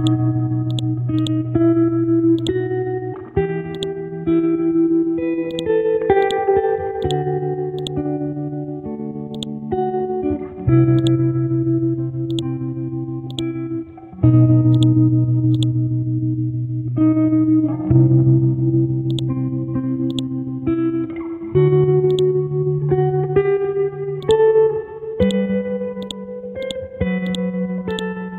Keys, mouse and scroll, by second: 0.6 ctrl+z, 0.7 click, 1.2 click, 7.0 ctrl+click, 7.8 click, 8.8-9.3 scroll up 1, 9.3 click, 11.0 shift+click, 12.3 click, 16.2-17.5 scroll down 1, 17.5-19.1 scroll up 1, 19.1 click, 20.1-22.8 drag, 22.8-24.2 scroll up 1, 24.2 click, 27.2 ctrl+click, 27.8-28.3 drag.